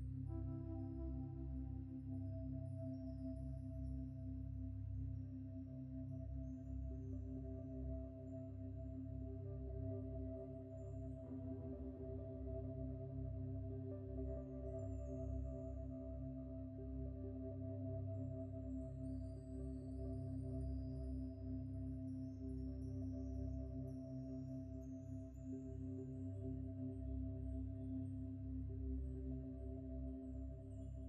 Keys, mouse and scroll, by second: 2.9 ctrl+v, 3.7 ctrl+t, 4.6 shift+click, 7.3 shift+click, 8.1 ctrl+space, 8.1 ctrl+click, 8.4 ctrl+space, 9.4 ctrl+z, 13.1 Return, 25.6 typing, 29.2 ctrl+v, 30.9 shift+click.